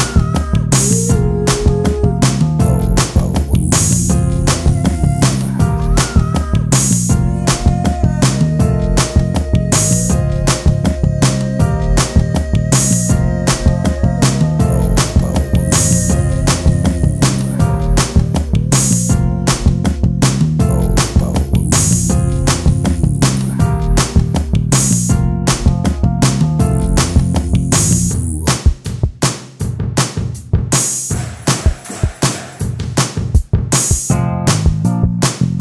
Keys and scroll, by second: 7.3 j.